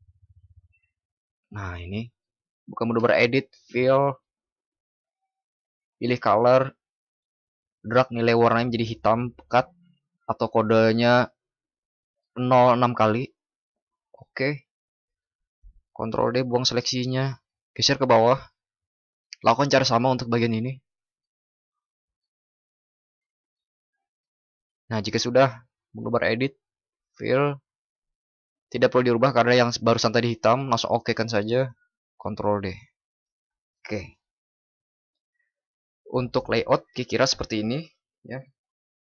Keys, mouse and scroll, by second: 16.0 ctrl+d, 32.0 ctrl+d.